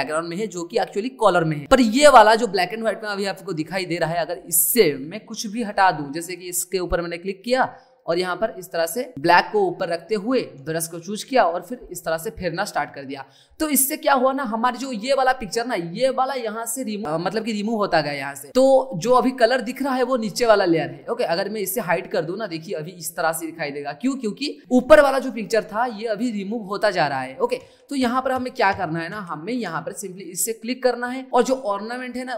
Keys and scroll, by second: 27.6 ctrl+z.